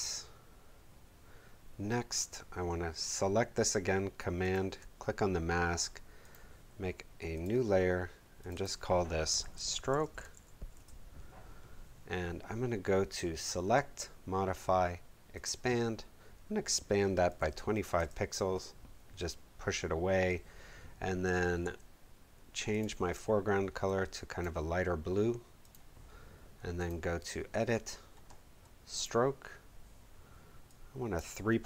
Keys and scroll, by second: 9.3-10.8 typing, 17.0-18.0 typing.